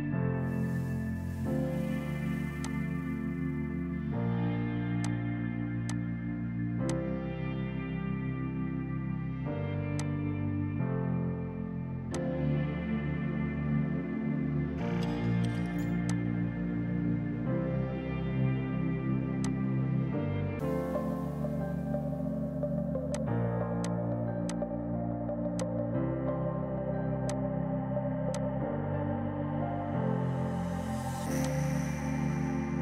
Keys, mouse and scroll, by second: 1.5 space, 2.7 click, 4.4 ctrl+k, 5.1 click, 6.4 Delete, 7.0 click, 8.4 ctrl+k, 9.1-9.9 typing, 10.1 click, 15.1 typing, 31.0 typing.